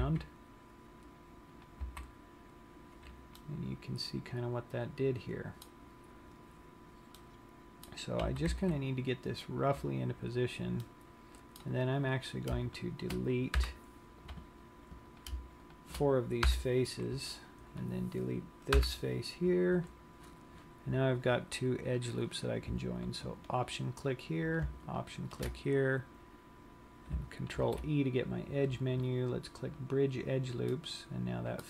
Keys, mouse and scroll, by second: 0.2 g, 2.1 click, 2.3 z, 3.9 middle click, 7.4 middle click, 8.4 g, 10.0 click, 10.4 scroll up 3, 11.1 middle click, 12.3 click, 13.0 shift+click, 13.7 Delete, 15.4 click, 15.9 shift+click, 16.6 Delete, 17.9 click, 18.9 Delete, 22.1 click, 23.9 alt+click, 25.0 alt+shift+click, 27.8 ctrl+e, 31.0 middle click.